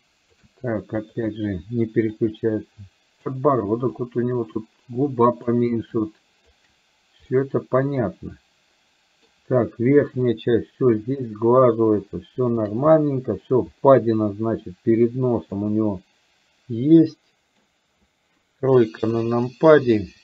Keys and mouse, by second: 1.1 click, 2.2-3.3 ctrl+drag, 3.9-5.6 ctrl+drag, 6.1 ctrl+click, 7.3-8.8 middle drag, 9.2 middle click, 10.3-12.7 shift+drag, 12.9 middle click, 15.6-17.7 middle drag, 18.9 KP_3.